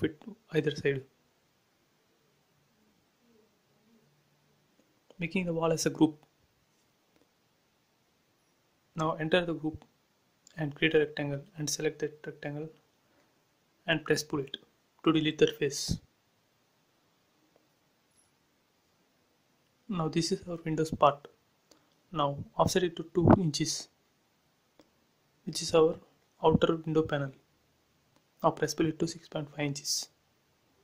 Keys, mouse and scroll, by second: 0.0-0.3 typing, 0.9 Return, 2.6 click, 3.4-5.2 typing, 4.9 Return, 5.6 click, 6.1 click, 6.6 right click, 7.7 click, 9.2 scroll up 1, 9.5 r, 10.3 click, 11.4 space, 11.8 click, 12.6 ctrl+c, 13.0 p, 13.2 click, 16.1 click, 16.2 space, 16.4 click, 17.4 shift+e, 18.7 click, 18.8 click, 20.1 right click, 21.2 click, 22.5 f, 23.1 click, 24.2 2, 24.7 shift+', 24.9 Return, 25.3 space, 25.5 click, 26.2 ctrl+x, 26.5 space, 27.5 p, 28.5 click, 29.0 space, 29.7 scroll up 1.